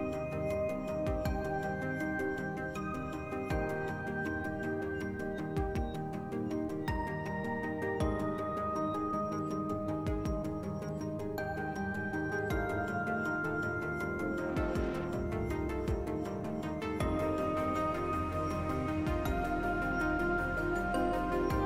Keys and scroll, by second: 0.1 s, 1.3 s, 3.4 s, 5.1 s, 7.5 s, 9.9 s, 12.8 s, 13.3 s, 15.1 s, 15.8 s, 17.0 s, 21.5 s.